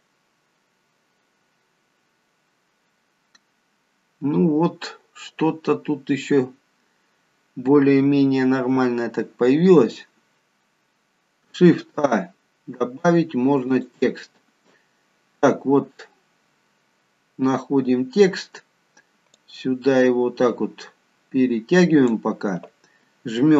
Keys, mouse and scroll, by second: 11.7 shift+a, 19.5 click.